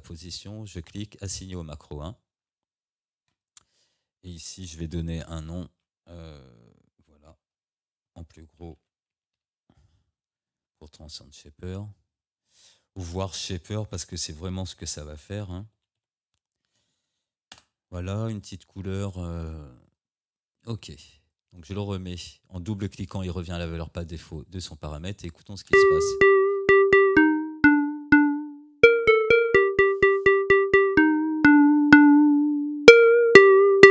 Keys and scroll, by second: 5.3 ctrl+r, 8.1 Caps_Lock, 8.7 t, 13.1 BackSpace, 14.5 s, 17.6 Return, 25.7 space.